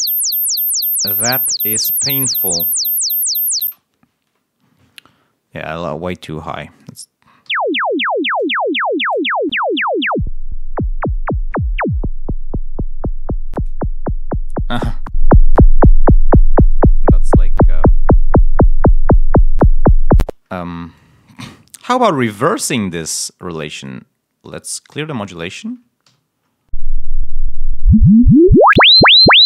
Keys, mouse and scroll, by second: 0.7 click, 3.5 space, 7.3 l, 10.0-13.7 drag, 15.0-18.0 drag, 18.7 click, 20.1 space, 26.0 l.